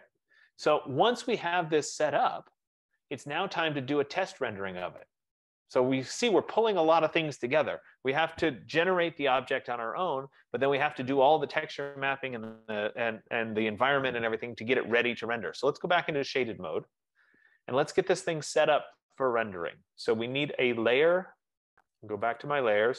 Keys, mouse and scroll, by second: 0.4 middle click, 2.8 right click, 4.6 click, 16.6 click, 17.6 scroll, 18.2 F15, 20.8 click, 20.8 middle click, 21.3 middle click, 22.5 click.